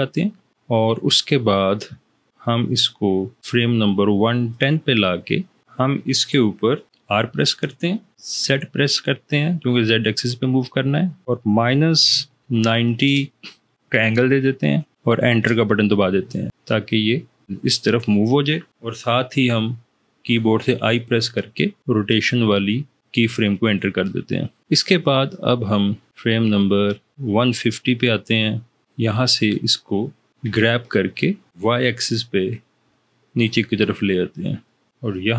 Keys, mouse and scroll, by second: 7.0 r, 8.2 z, 11.3 -, 12.0 9, 12.8 0, 15.5 Return, 20.4 i, 30.4 g, 31.5 y.